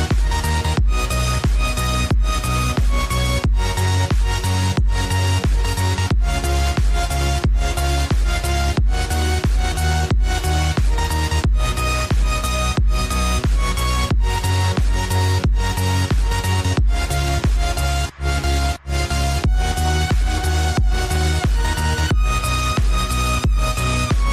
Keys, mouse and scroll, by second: 0.8 click, 1.6 click, 3.4 click, 4.7 click, 7.8 Tab, 9.1 click, 9.7 click, 10.9 click, 12.0 click, 13.8 click, 16.7-18.6 scroll up 1, 18.6 click, 20.0-21.5 drag, 21.5 ctrl+b, 24.1 drag.